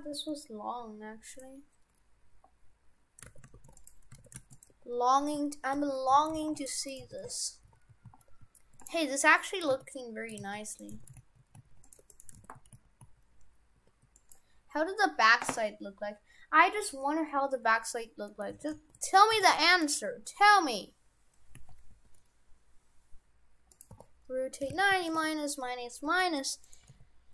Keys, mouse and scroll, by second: 3.3 shift+f, 4.3 shift+f, 4.7 Tab, 5.8 alt+h, 6.2 shift+f, 6.9 right click, 7.1 shift+f, 9.7 ctrl+z, 10.5 ctrl+z, 10.9 right click, 11.0 shift+f, 12.0 Tab, 12.1 right click, 12.4 shift+f, 18.3 middle click, 18.6 shift+f, 19.5 shift+f, 20.3 scroll down 4, 20.9-21.6 scroll up 2, 21.6 a, 21.9 g, 23.9 r, 26.1 g, 26.9 g.